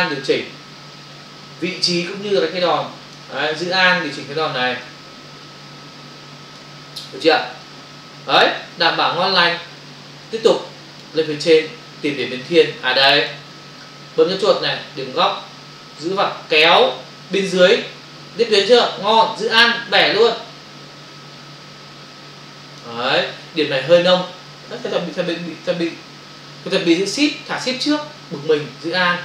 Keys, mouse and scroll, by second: 4.8 alt+click, 7.5 space, 10.3 space, 10.3 click, 10.5 space, 16.0 click.